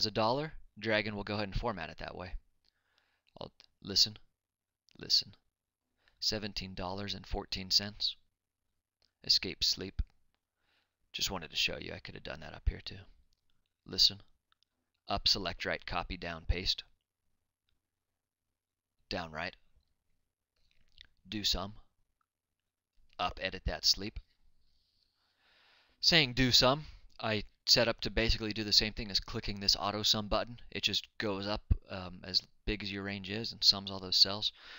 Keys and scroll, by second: 8.1-9.4 typing.